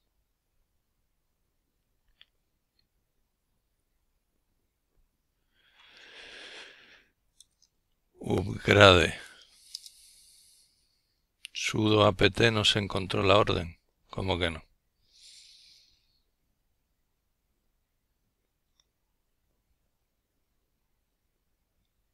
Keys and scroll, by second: 5.0-7.3 typing, 9.1 typing, 12.9-15.6 typing, 16.7-22.1 typing.